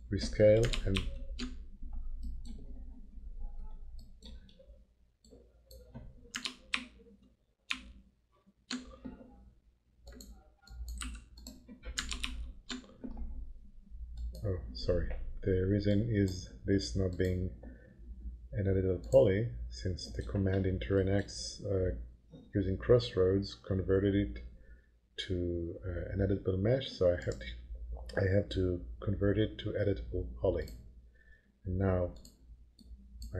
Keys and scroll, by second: 1.0 ctrl+shift+9, 6.7 ctrl+shift+9, 7.7 ctrl+shift+8, 11.0 8, 12.2 ctrl+shift+9.